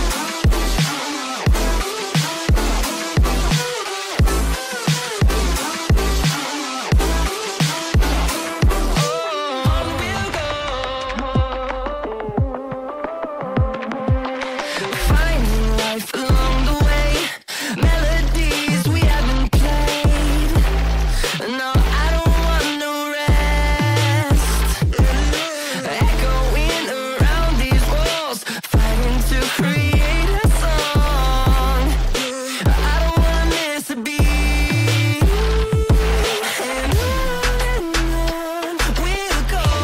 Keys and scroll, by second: 3.1 space, 11.3 shift+F2, 11.8 Escape, 24.9 space, 27.0 F2.